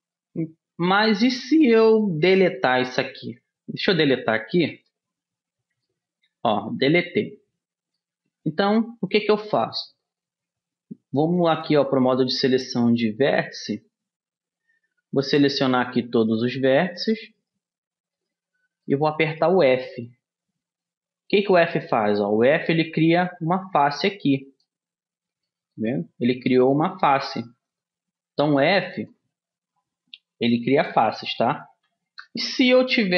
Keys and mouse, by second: 0.3-4.2 middle drag, 4.2 Delete, 10.4-12.4 middle drag, 12.4-13.8 drag, 13.8 middle click, 14.4-19.0 right drag, 20.0-23.4 middle drag, 20.6 f, 23.4-25.0 drag, 25.2-27.8 middle drag, 27.8-29.4 drag, 29.4-31.8 middle drag, 31.8 a.